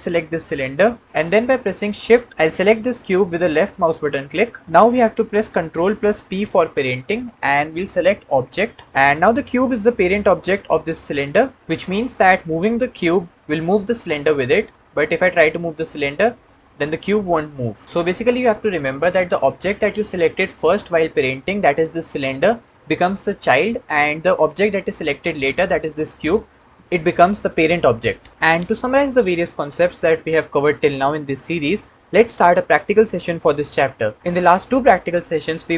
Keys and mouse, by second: 0.2 click, 3.6 shift+click, 6.2 ctrl+p, 12.8 g, 15.6 g.